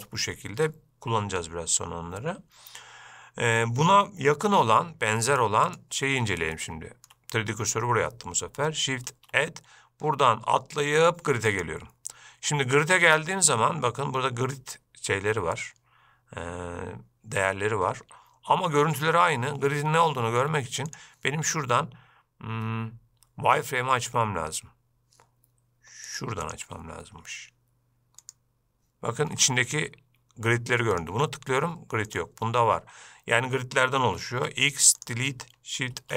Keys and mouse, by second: 5.9 shift+right click, 6.8-7.3 shift+middle drag, 9.3 shift+a, 21.1-26.4 drag, 26.7-29.1 drag, 31.1 click, 32.3 drag, 34.6 x.